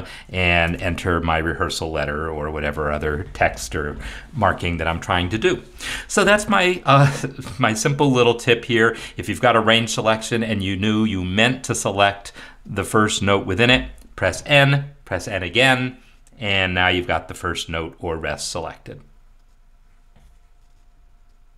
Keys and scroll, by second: 0.7 shift+a.